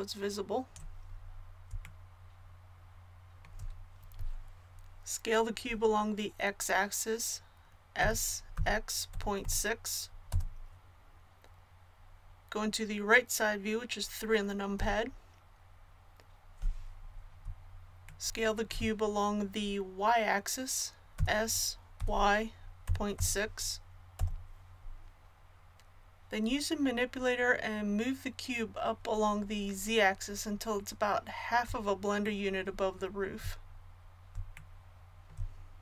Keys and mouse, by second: 7.9 s, 14.7 KP_3, 21.2 s.